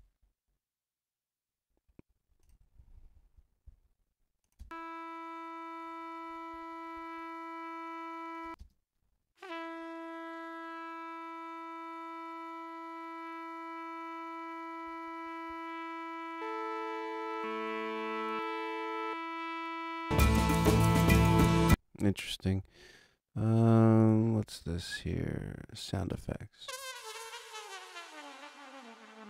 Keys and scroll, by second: 4.5 space, 8.4 space, 21.6 space, 26.1 space.